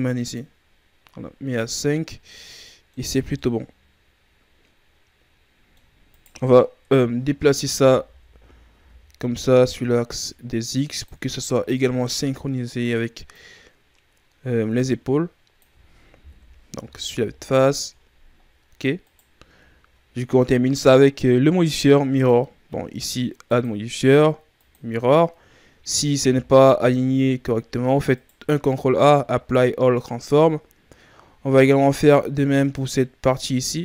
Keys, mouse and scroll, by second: 1.3 scroll down 2, 1.5-2.2 middle drag, 2.2 scroll down 1, 2.4-3.0 middle drag, 3.0 a, 3.3-6.0 middle drag, 6.0 right click, 6.7 KP_3, 7.6 Tab, 8.0 a, 8.2 a, 8.6 a, 9.4 click, 11.3-11.9 ctrl+scroll up 4, 13.2 click, 16.1 KP_1, 16.7 Tab, 17.0 a, 17.2-18.3 scroll down 5, 18.3-18.9 scroll up 3, 18.9-19.6 right drag, 19.6-22.0 scroll up 2, 22.0 click, 25.7-26.1 ctrl+scroll down 2, 26.1 a, 26.4-26.8 scroll down 3, 26.8-28.0 shift+scroll up 5, 28.0 right click, 28.6 ctrl+a, 31.1-32.6 ctrl+scroll up 4, 32.6 right click.